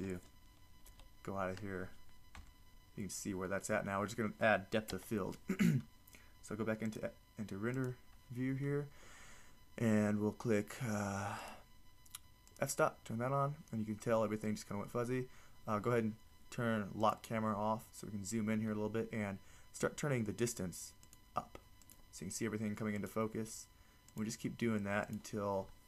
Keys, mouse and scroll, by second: 1.0 KP_7, 2.5 z, 5.1 KP_0, 17.0 click, 17.8 click.